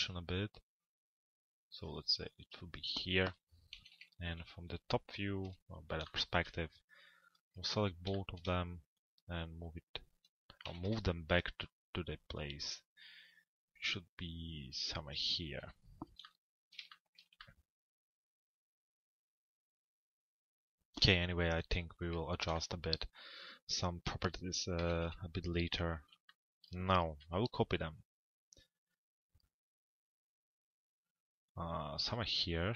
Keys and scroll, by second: 3.4 t, 3.9 z, 5.4 p, 10.4 t, 10.8 z, 15.2 p, 24.5 t, 25.0 z.